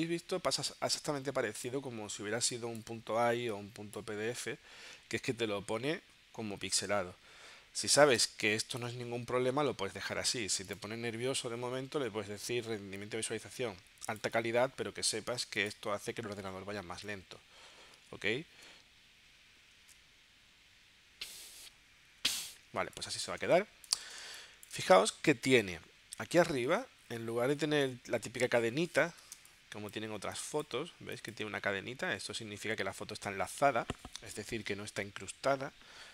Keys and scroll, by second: 8.3 space, 18.0 super+Tab, 20.4 super+Tab, 22.8 space, 24.2 space, 29.5 space.